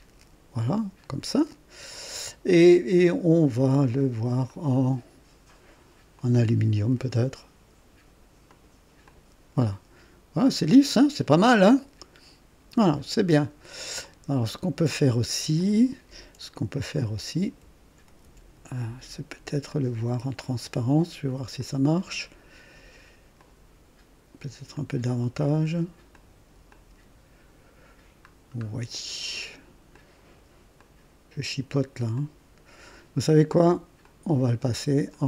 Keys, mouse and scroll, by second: 4.4 click, 6.1 click, 8.4 click, 9.0 click, 9.6-13.7 drag, 14.0 click, 15.5 click, 16.9 click, 18.0 ctrl+d, 19.6-21.3 drag, 21.5 click, 23.3 click, 24.7-26.0 drag, 26.1 click, 26.7-28.0 drag, 28.3 scroll down 1, 29.9 click, 30.7 click, 32.1 click, 34.0 click, 35.1 click.